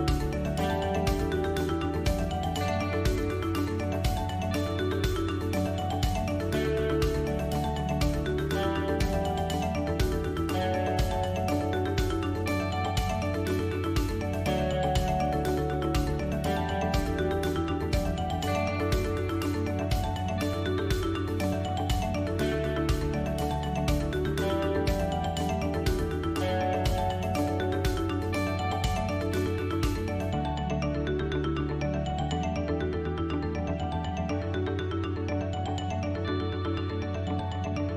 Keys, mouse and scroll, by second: 0.3 alt+click, 1.6 alt+shift+click, 2.7 KP_3, 3.7 click, 5.1 ctrl+b, 8.3 click, 8.9 middle click, 10.0 click, 10.9 3, 11.2 click, 11.4 middle click, 12.4 shift+click, 13.7 KP_3, 14.9 s, 17.2 click, 18.1 middle click, 19.4 click, 19.8 middle click, 22.8 e, 25.1 s, 28.4-29.0 scroll down 1, 29.0 middle click, 32.7 KP_1, 35.0 Tab, 36.7 shift+a.